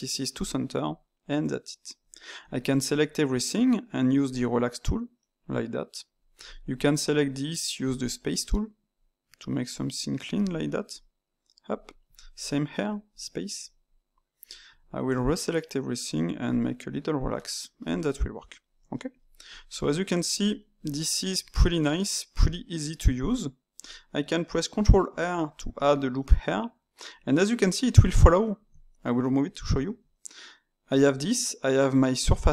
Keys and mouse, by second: 0.3-1.0 drag, 1.0-2.4 middle drag, 2.4 a, 2.9 a, 4.2 click, 5.2-6.4 middle drag, 6.4 alt+click, 8.0 click, 8.9 middle click, 9.6 click, 10.4 middle click, 10.9 click, 12.1 alt+click, 13.0 click, 13.6-14.6 middle drag, 14.6 a, 15.0 a, 16.4 click, 17.3-19.4 middle drag, 19.4 click, 19.7-22.4 middle drag, 22.4 click, 23.2 click, 25.0 ctrl+r, 26.1-28.6 middle drag, 28.6 Tab, 32.4-32.5 ctrl+middle drag.